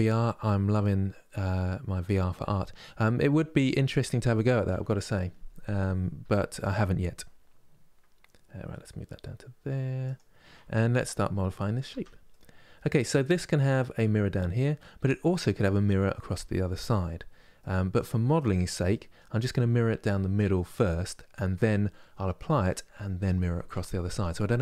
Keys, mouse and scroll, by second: 2.5-4.4 middle drag, 4.4 KP_3, 5.9 g, 11.6 Tab, 12.0-21.6 middle drag.